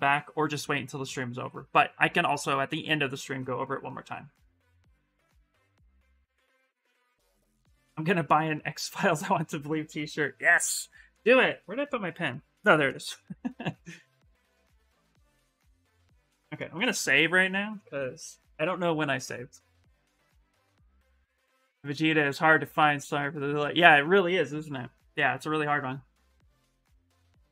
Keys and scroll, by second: 18.4 Return, 18.9 Return.